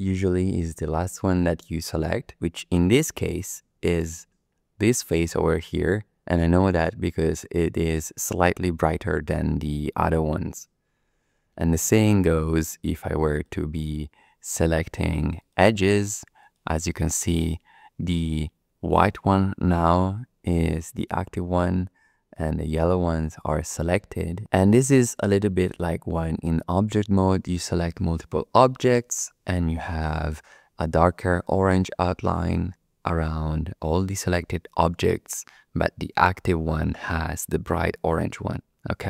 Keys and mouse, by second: 11.6 2, 13.3 click, 15.4 shift+click, 16.4 shift+click.